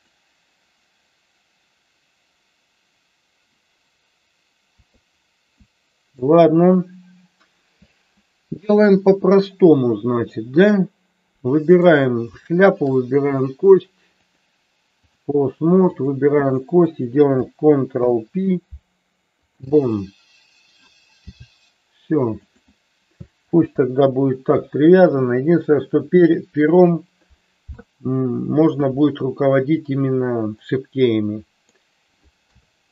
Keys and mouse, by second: 5.8 shift+middle click, 11.6 click, 12.6 shift+click, 14.3 click, 17.9 ctrl+p, 21.1 g, 22.5 click, 23.4 ctrl+z, 30.6-31.9 middle drag, 32.5 KP_3.